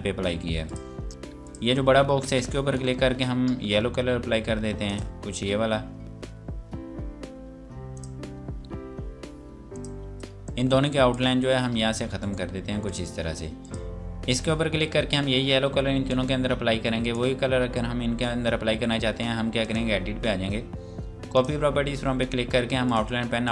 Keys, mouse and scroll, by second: 0.7 click, 5.6 click, 7.9 click, 12.2 right click, 12.9 click, 16.1 click, 19.6 click.